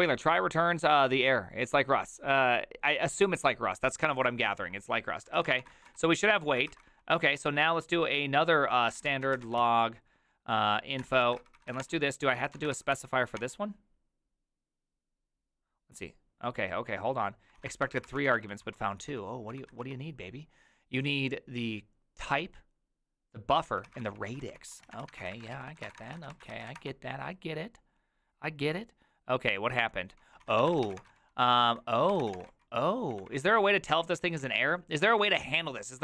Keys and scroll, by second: 4.0 alt+{, 5.3-7.3 typing, 8.5-10.1 typing, 11.0 Tab, 11.3 ctrl+c, 11.5-13.4 typing, 12.3 ctrl+a, 17.6 ctrl+a, 17.8-20.3 typing, 18.0 ctrl+c, 23.8-26.3 typing, 26.5 ctrl+c, 26.7 Up, 26.7 Return, 30.4-34.3 typing.